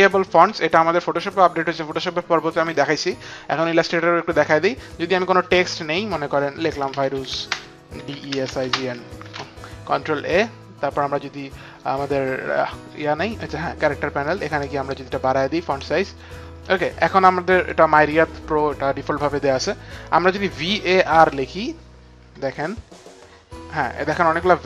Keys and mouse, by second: 3.8 click, 4.9 click, 6.4-7.4 typing, 6.7 click, 6.9 click, 9.1 ctrl+a, 15.0 shift+click, 17.5 shift+click, 20.5-21.6 typing, 20.7 click.